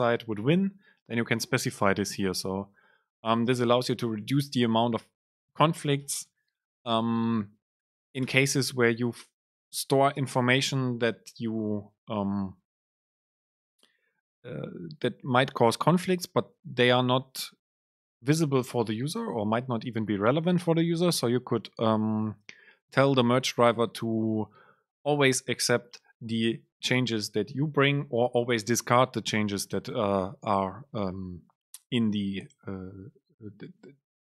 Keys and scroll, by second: 6.2 BackSpace, 8.9 Escape, 9.4 Up, 9.9 End, 10.4 Left, 11.0 Left, 11.0 super+space.